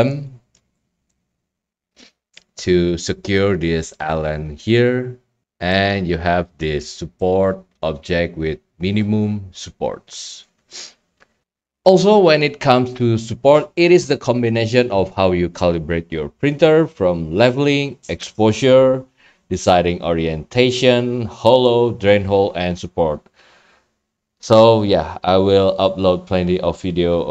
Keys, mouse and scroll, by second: 1.1 right click, 1.3-1.9 scroll, 5.4 middle drag, 5.4 scroll, 5.7-6.1 right drag, 6.4 right drag, 6.6-7.2 middle drag, 7.2 right click, 7.2 scroll, 21.6 right click.